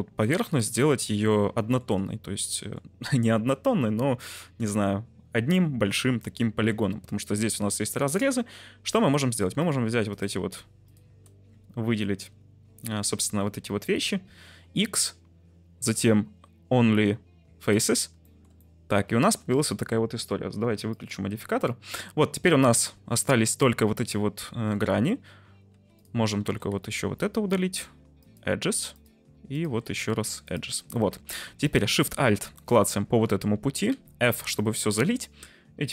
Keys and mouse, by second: 1.0 t, 1.5 shift+middle click, 2.6 middle click, 6.8 2, 7.0 middle click, 9.1 3, 9.5 middle click, 10.0 click, 10.8 click, 13.8 x, 18.2 shift+middle click, 18.6 middle click, 19.4 Tab, 20.8 click, 21.6 middle drag, 24.6 Tab, 25.7 2, 25.9 click, 26.7 x, 28.9 click, 29.5 shift+click, 29.8 x, 31.1 2, 33.8 f, 34.2 Tab, 34.5 middle click.